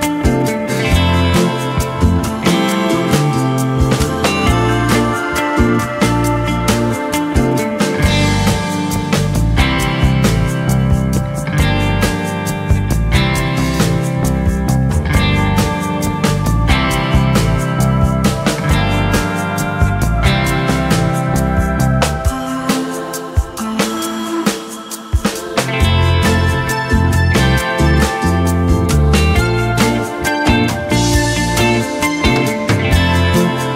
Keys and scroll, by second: 1.1 ctrl+j, 10.4 3, 14.1 ctrl+j, 21.3-22.1 typing, 24.4 ctrl+j, 31.0 j.